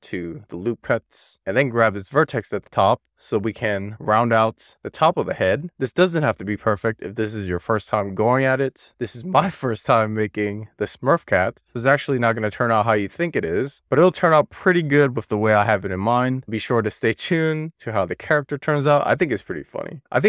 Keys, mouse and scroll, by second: 0.8 click, 2.4 click, 3.3 click, 9.1 click, 9.7 click, 16.3 alt+z, 17.0-18.1 scroll down 3.